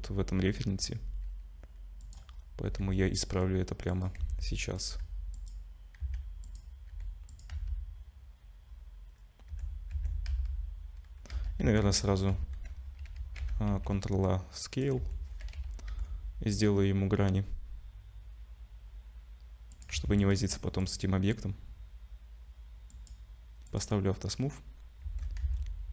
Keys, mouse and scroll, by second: 0.8 g, 2.3 scroll up 3, 2.7 g, 4.2 s, 4.9 g, 6.0 s, 6.9 g, 7.5 z, 8.0-8.4 scroll down 2, 8.7 scroll down 1, 9.5 Tab, 9.5-9.9 scroll up 1, 9.9 Tab, 10.3 z, 11.6 Tab, 11.8-12.4 scroll up 2, 13.1 ctrl+a, 13.4 Tab, 13.7 ctrl+a, 15.0 Tab, 15.9 ctrl+b, 19.9 Tab, 20.2 right click, 22.9 click, 23.7 click, 24.5-25.0 scroll down 2, 25.0 Tab, 25.4 a.